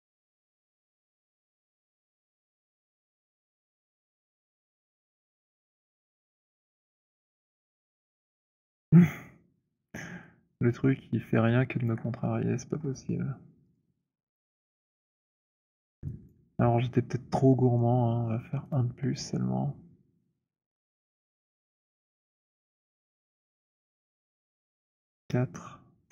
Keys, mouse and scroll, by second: 1.1 alt+middle click, 1.5 alt+click, 2.8 click, 4.0 Return, 5.9 click, 7.7 click, 9.1 middle click, 9.3 middle click, 9.9 alt+middle click, 10.2 alt+middle click, 11.7 alt+middle click, 11.7 alt+click, 12.6 alt+middle click, 13.7 click, 14.2 click, 14.6 alt+click, 14.8 Delete, 14.8-15.3 scroll, 16.2 alt+click, 16.9 alt+click, 17.7-18.6 alt+scroll, 18.6 click, 21.3 click, 22.6 click, 23.6 click, 25.2 click, 26.0 Return.